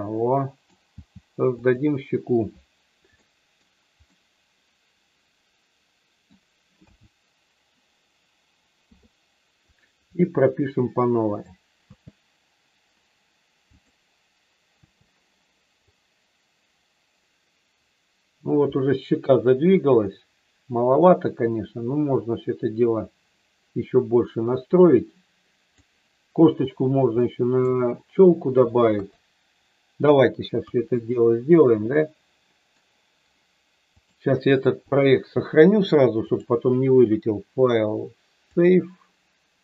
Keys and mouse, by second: 1.0 g, 1.5 click, 3.2 middle click, 4.0-6.2 middle drag, 6.9 a, 8.8 i, 11.0 middle click, 11.8 space, 13.8 click, 15.9-25.7 drag, 27.1 middle click, 28.9 KP_3, 30.5 KP_1, 31.9 middle click, 34.0 click, 34.9 click, 36.2-38.7 drag.